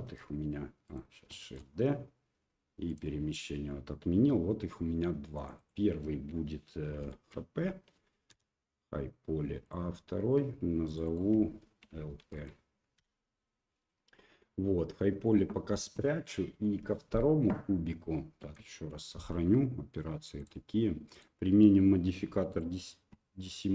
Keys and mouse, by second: 0.1 g, 2.3 shift+d, 5.4 click, 5.6-8.5 drag, 10.9 click, 11.1-13.7 drag, 15.2 click, 16.2 middle click, 18.7 ctrl+s, 20.4 click, 21.1-23.2 drag.